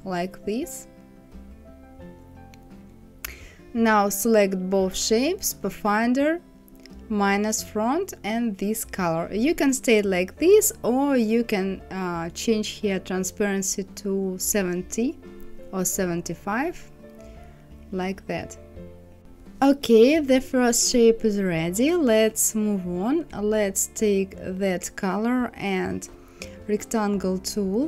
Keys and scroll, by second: 0.3 Left, 1.2 Up, 13.3 KP_7, 13.6 KP_5, 14.1 Return.